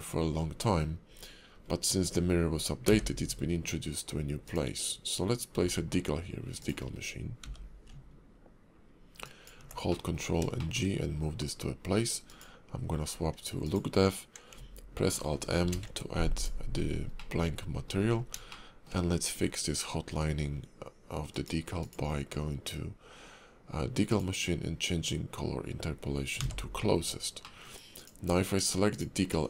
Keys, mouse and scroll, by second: 0.1 scroll down 1, 0.3-1.4 scroll up 1, 1.4 scroll up 1, 1.5-2.3 scroll down 2, 2.9 d, 5.5 s, 6.8-7.4 scroll up 2, 7.4 g, 9.9 middle click, 10.3 scroll up 1, 10.6 shift+middle click, 12.5 click, 13.6 click, 15.7 alt+m, 17.3 middle click, 18.2 scroll up 3, 18.6 shift+middle click, 19.1 scroll up 1, 20.2-21.2 scroll down 2, 21.3 click, 21.8 click, 24.2 click, 26.4 n, 27.6 middle click, 28.0 click, 28.4 scroll down 4, 28.9 shift+click.